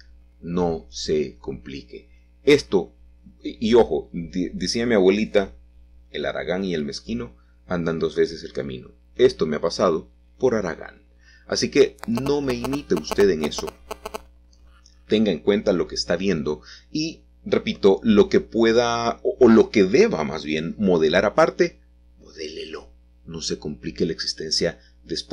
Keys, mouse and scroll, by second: 0.2 Escape, 1.1 r, 1.6 x, 2.0 9, 2.1 0, 3.0 Escape, 3.8-5.6 typing, 6.2 Return, 7.4-8.2 scroll up 1, 8.2 s, 10.8 click, 11.9 middle click, 13.2-15.9 shift+middle drag, 14.3-14.7 scroll down 1, 14.7-15.9 scroll up 2, 17.1 shift+z, 19.0 click, 19.8 7, 22.0 s, 23.2 click, 23.9 g.